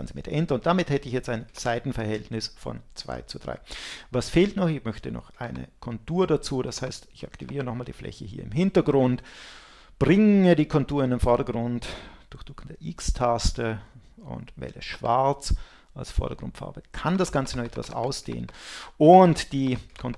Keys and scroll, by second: 0.0 Return, 12.6 x.